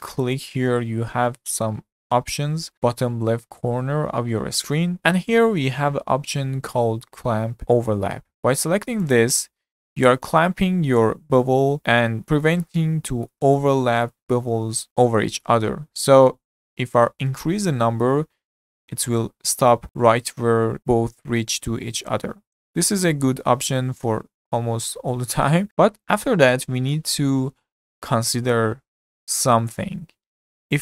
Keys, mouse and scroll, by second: 9.0 click, 10.4-16.6 middle drag, 16.6-19.6 drag, 26.1 click, 27.0-30.8 middle drag.